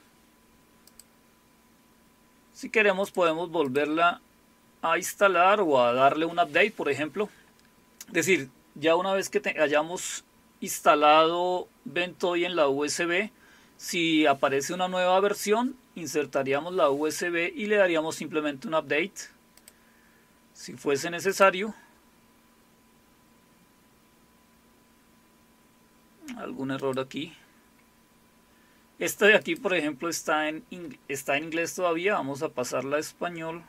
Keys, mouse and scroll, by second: 0.9 click, 3.0 click, 3.7 click, 19.6 click, 21.3 click, 26.8 click, 29.4 click, 31.8-33.6 scroll down 3.